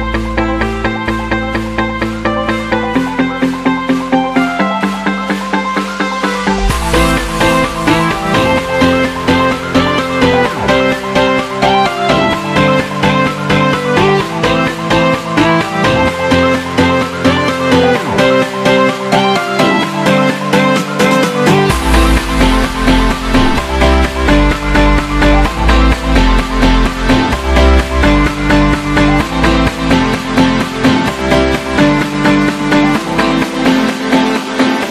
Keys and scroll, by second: 0.2 super+=, 0.6 super+=, 2.6 super+=, 10.4 super+-, 20.9 super+z, 22.6 super+z.